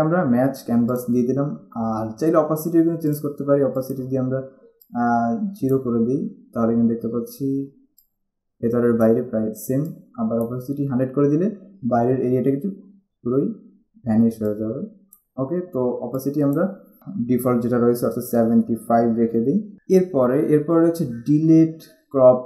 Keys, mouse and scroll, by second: 1.1 click, 3.3 click, 8.1 click, 14.6 click, 16.3 click, 19.4 typing, 19.7 click.